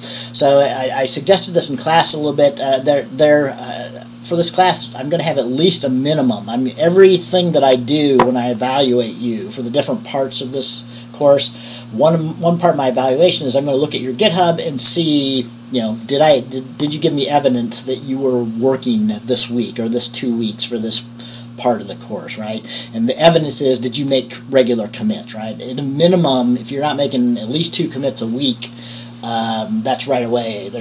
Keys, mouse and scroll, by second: 4.6 click.